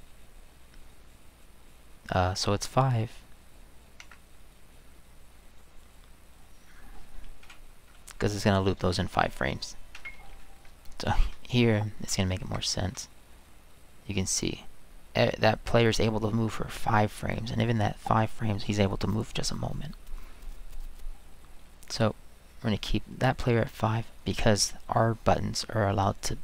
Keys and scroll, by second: 4.0 Escape, 10.0 Return, 11.3-12.1 Right, 12.4 Escape, 12.9 Right, 13.4 Right, 13.5 Right, 13.6-15.4 Right, 15.4-17.3 Left.